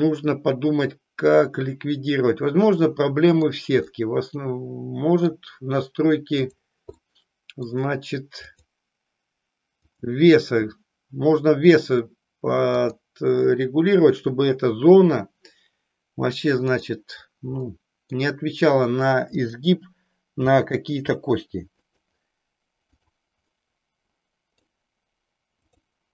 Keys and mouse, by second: 3.9-5.4 middle drag, 6.5 click, 7.0 middle click, 8.5 click, 9.9 click, 12.7-16.9 drag, 17.9 middle click, 19.2 click, 20.7 g, 22.0 click, 22.9 click, 23.5-24.7 middle drag.